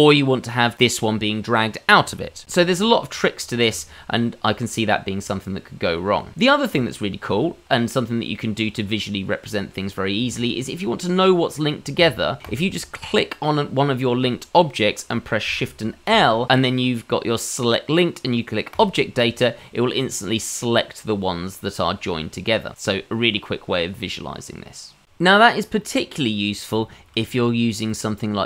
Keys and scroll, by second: 16.0 shift+l.